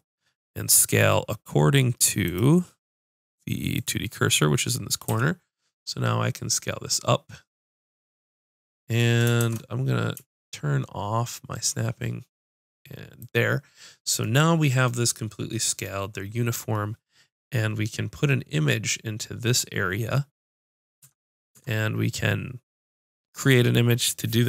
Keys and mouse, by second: 5.1 s, 14.8 click, 21.0 Tab, 21.5 Tab.